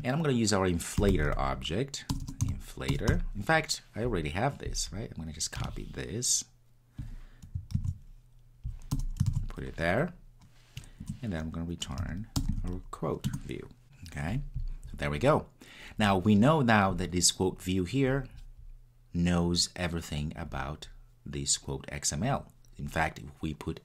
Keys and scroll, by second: 7.8 super+x, 13.3 Return.